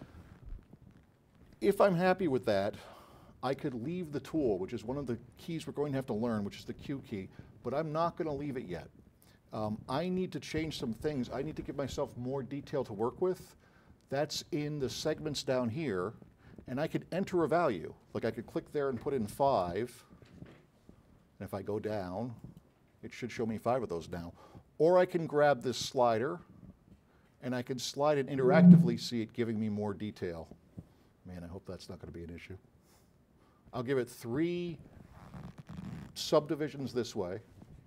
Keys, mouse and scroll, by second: 2.5-5.6 alt+drag, 7.4 click, 17.7 click, 19.5 KP_5, 22.5 click, 25.8 click, 26.8 click.